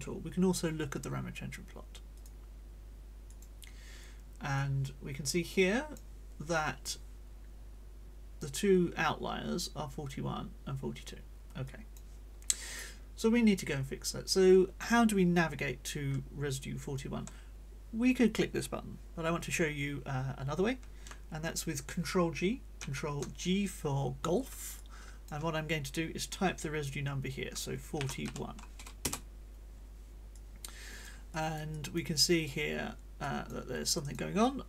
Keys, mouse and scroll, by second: 2.2 click, 3.2 click, 4.6-6.1 drag, 11.6 click, 22.8 ctrl+g, 24.8 click, 28.0 4, 28.2 1, 29.0 Return, 30.3 click, 31.3-32.6 drag, 31.7 right click, 33.2 click, 33.8 click, 34.4-34.6 drag.